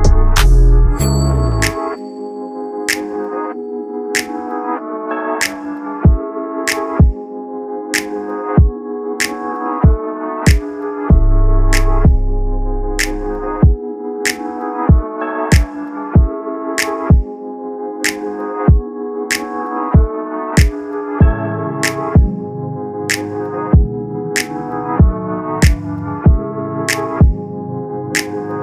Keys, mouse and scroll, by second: 1.3 click, 5.0 ctrl+scroll, 6.2 click, 14.6-14.9 ctrl+scroll, 18.7 ctrl+scroll, 19.6-19.9 ctrl+scroll, 20.7 click, 25.0 click, 25.3 ctrl+scroll, 27.0 click.